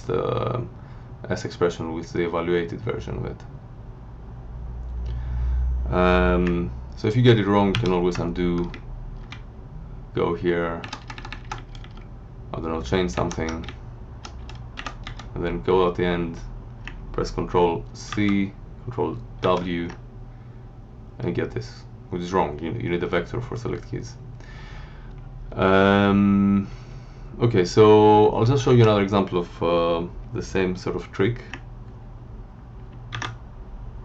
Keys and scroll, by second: 7.7 ctrl+/, 8.6 Right, 9.3 Left, 10.8 Up, 11.5 Right, 13.1 alt+Up, 13.6 Down, 14.7 End, 15.0 Left, 18.0 ctrl+c, 19.4 ctrl+w, 25.0 Left, 27.8 Left, 28.6 Up, 33.1 ctrl+c.